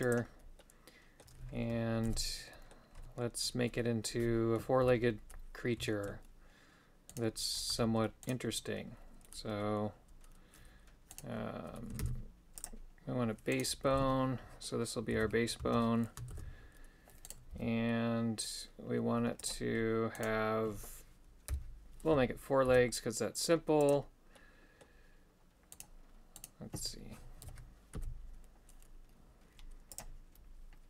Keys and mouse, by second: 0.6 middle click, 2.1 alt+g, 2.5 middle click, 3.8 middle click, 4.9 KP_1, 5.9 shift+middle click, 7.8 Tab, 11.2 right click, 12.1 shift+s, 13.6 right click, 14.0 r, 16.4 shift+r, 17.3 right click, 17.6 g, 21.5 KP_7, 22.7 e, 24.4 middle click, 25.8 right click, 26.4 right click, 27.5 KP_7, 28.0 e.